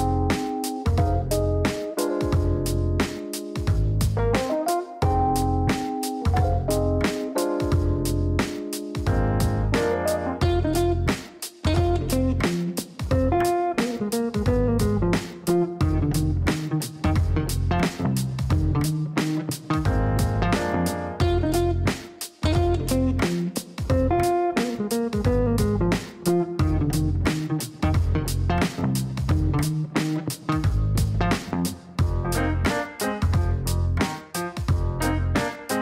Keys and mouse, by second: 1.1 click, 4.0 click, 4.7 space, 6.2 click, 11.1 click, 12.8 click, 13.8 click, 16.8 click, 19.7 click, 24.8 click, 26.0 click, 27.6 KP_6, 27.7 KP_0, 28.0 KP_Enter, 30.2 click, 31.5 KP_9, 31.6 KP_0, 31.8 KP_Enter, 33.7 click, 34.8 KP_4, 34.9 KP_5, 35.2 KP_Enter.